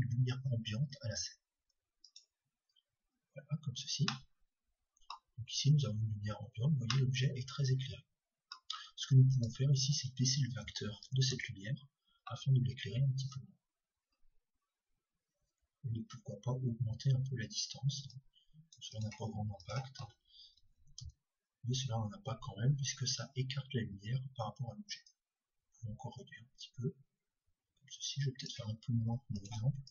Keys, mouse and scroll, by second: 4.6-9.3 middle drag, 9.3-12.7 drag, 16.1-22.8 drag, 25.1-28.7 drag.